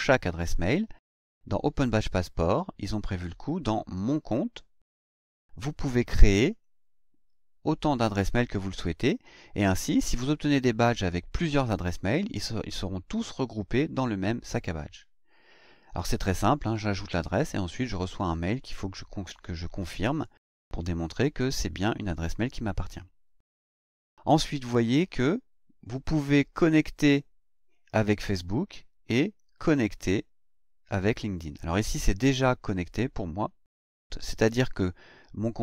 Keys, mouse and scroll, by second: 4.2 click, 6.5 click, 25.0 click, 29.1 click.